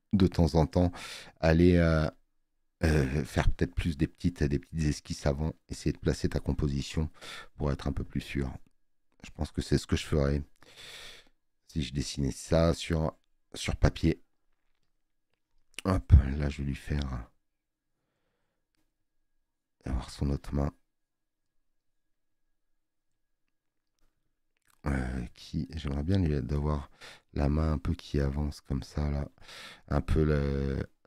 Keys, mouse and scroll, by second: 14.8 space, 14.9 click, 29.5 alt+scroll up 2.